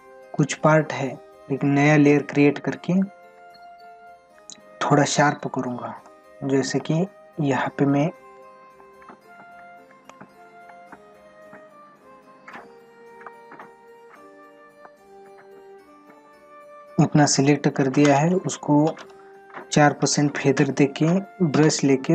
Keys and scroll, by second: 3.9 ctrl+-, 6.1 space.